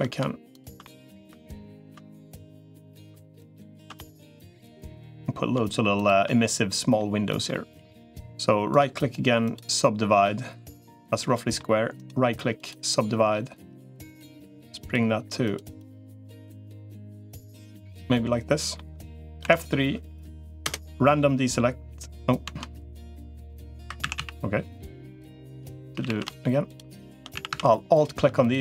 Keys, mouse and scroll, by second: 0.6 middle click, 1.9 middle click, 3.8 middle click, 4.4 middle click, 4.8 middle click, 6.2 middle click, 7.1 middle click, 8.6 right click, 10.0-11.4 middle drag, 11.8 right click, 14.6 click, 15.6 click, 17.9 middle click, 19.2 F3, 23.6 3, 23.8 a, 24.0 a, 24.8 middle click, 25.2 middle click, 25.8 a, 26.0 a, 27.2 a.